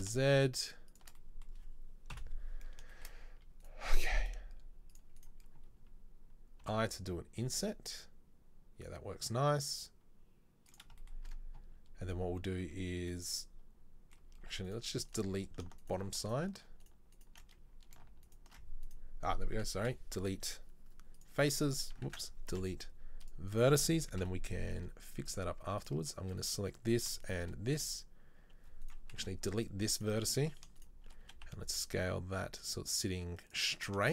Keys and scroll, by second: 2.3 KP_7, 6.7 i, 19.8 Delete, 22.2 ctrl+z, 22.6 Delete, 24.3 KP_7, 29.2 Delete, 31.4 s.